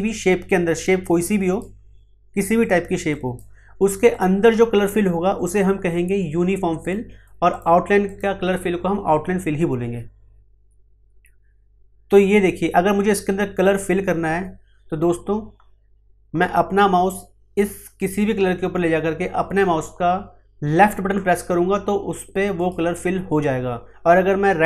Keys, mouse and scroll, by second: 0.7-2.6 drag, 6.8 click, 22.5 click.